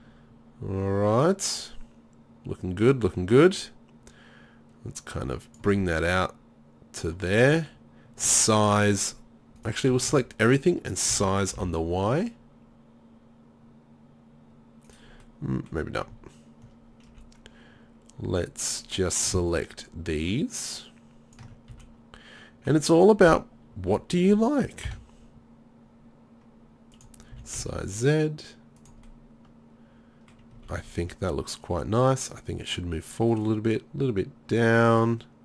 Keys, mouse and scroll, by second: 0.2 middle click, 6.3 middle click, 6.7-7.7 middle drag, 8.3 s, 10.0 a, 10.1 a, 11.2 s, 17.1 z, 19.2-21.4 right drag, 21.7 z, 22.0 middle click, 23.7 s, 27.4 s, 29.0 middle click, 29.5 middle click, 30.6 a, 30.8 a.